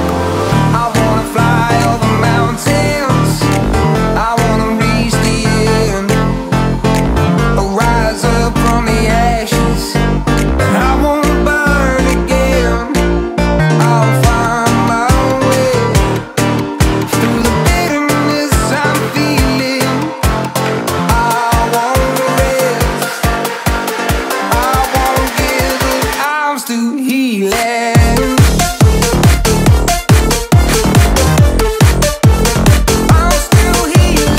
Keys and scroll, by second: 19.6 ctrl+-, 19.6 ctrl+j, 27.8 ctrl+=, 28.1 ctrl+=, 28.3 ctrl+=, 29.7 ctrl+=, 30.0 ctrl+=, 33.1 [, 34.1 [.